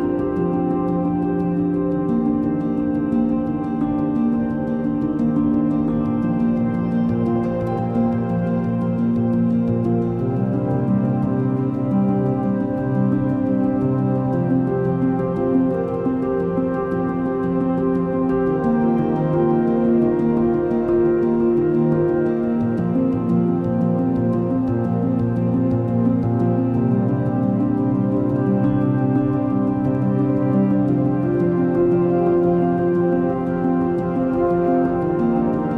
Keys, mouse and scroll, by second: 8.8 shift+click, 10.8 shift+click, 12.2 shift+click, 13.4 shift+click, 20.8 Return, 29.4 alt+click.